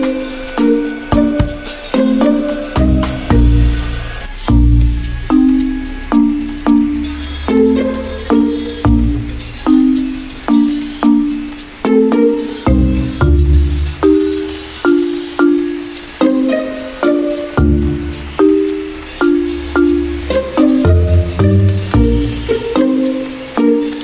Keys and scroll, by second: 12.2 v, 15.8 ctrl+z, 17.1 a, 20.3 a, 22.5 a.